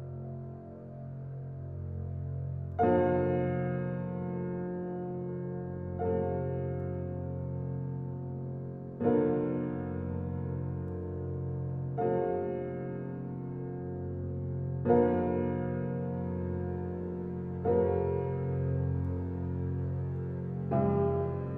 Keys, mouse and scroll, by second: 0.4 g, 2.7 Tab, 3.4 click, 3.7 click, 4.2 shift+middle click, 4.4-5.1 scroll up 6, 5.1 shift+middle click, 5.6 e, 6.6 e, 7.8 e, 8.4 e, 10.3 e, 10.9 e, 11.9 shift+middle click, 12.3-12.8 scroll down 4, 12.8 shift+middle click, 13.3 e, 14.7 shift+middle click, 15.3 e, 16.5-19.8 typing, 20.6 shift+middle click, 21.2 e.